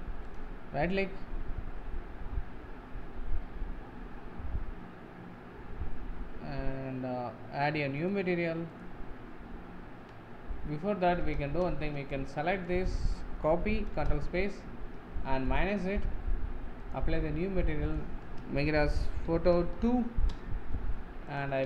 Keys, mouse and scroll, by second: 8.1-8.9 drag, 14.1 ctrl+space, 15.6-21.5 drag.